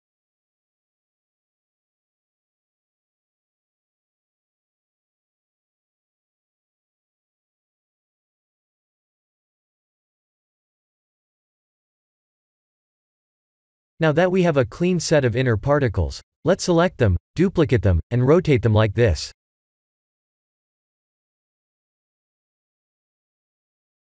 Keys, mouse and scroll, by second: 1.5 drag, 4.6 shift+a, 6.2 s, 7.3 click, 7.8 KP_0, 16.1-19.7 right drag, 21.1 KP_1, 21.7 KP_3, 23.7-24.0 shift+middle drag.